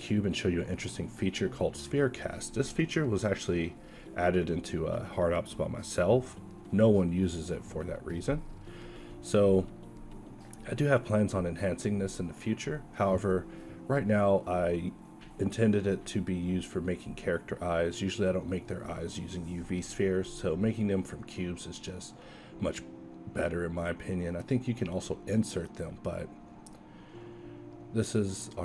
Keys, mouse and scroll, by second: 2.3 s, 3.1 q, 5.1 ctrl+z, 6.1 alt+c, 7.7 q, 9.0 z, 9.5 KP_1, 9.8 Tab, 10.2 a, 10.9 b, 12.7 x, 13.7 Tab, 14.1 g, 16.3 drag, 16.6 z, 17.4 s, 18.4 s.